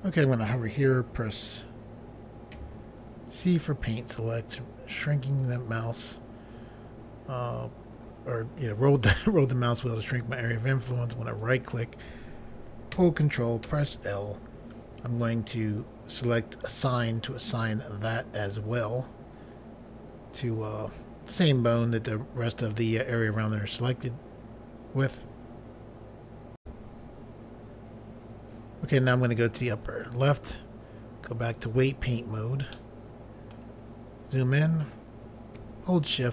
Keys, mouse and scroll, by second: 2.5 c, 3.7 scroll up 1, 4.4-5.0 scroll up 1, 5.3 click, 11.4 right click, 13.6 ctrl+l, 16.6 click, 27.8 Pause, 30.0 click, 31.4 click, 32.7 middle click, 33.8 scroll up 1.